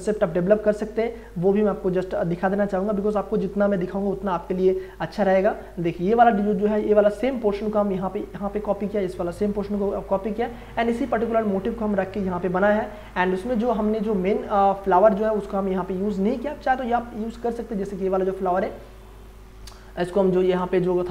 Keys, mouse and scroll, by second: 5.9 ctrl+space, 6.2 ctrl+click, 6.5 ctrl+space, 11.9 click, 13.0-13.8 scroll up 1, 15.0-16.3 scroll up 1, 16.3-21.1 drag.